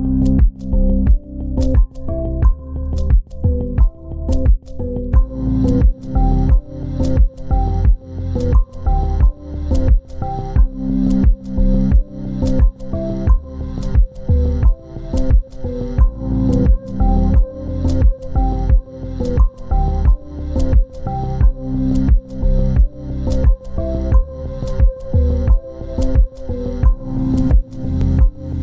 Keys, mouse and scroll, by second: 3.2 shift+click, 5.9 ctrl+space, 7.4 scroll down 1, 7.8-8.3 scroll up 1, 13.8 scroll down 1, 14.2 z, 15.4 ctrl+space, 17.4 ctrl+click, 18.0 ctrl+right click, 18.7 scroll down 1, 19.8 ctrl+r, 20.1 ctrl+r, 20.4 ctrl+r, 20.6 ctrl+r, 20.7 ctrl+r, 24.6 scroll down 1, 27.3 ctrl+z, 27.8 z.